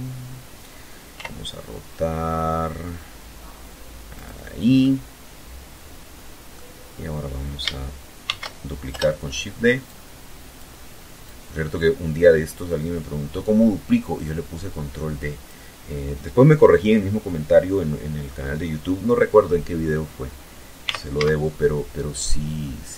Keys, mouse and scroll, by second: 1.4 click, 2.1-4.0 middle drag, 5.5 shift+d, 6.1 Return, 7.1-8.0 drag, 8.6-13.0 drag, 18.1 r, 18.4 z.